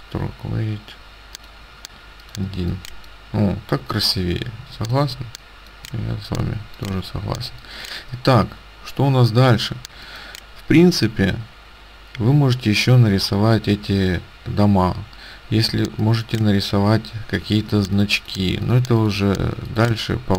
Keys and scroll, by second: 2.5 space, 7.4 space, 15.9 ctrl+space, 17.7 ctrl+space.